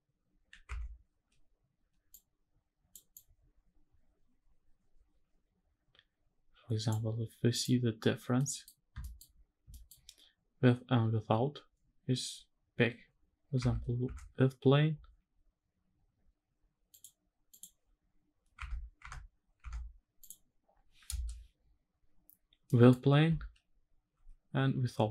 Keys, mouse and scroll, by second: 0.4 Tab, 1.8 click, 2.8-6.6 drag, 7.2 click, 7.7 scroll up 2, 8.1 middle click, 8.6 scroll up 1, 9.5 shift+middle click, 9.8 scroll down 1, 10.6-11.0 scroll down 2, 11.0 scroll, 11.0 scroll up 1, 13.3 Tab, 13.7 Tab, 15.8-16.3 scroll down 2, 16.6 click, 17.2 click, 17.6-18.1 scroll down 3, 18.4 Tab, 18.6 Tab, 19.3 Tab, 19.9 click, 20.8 KP_0, 21.8 scroll up 1, 22.4 middle click, 23.8 h.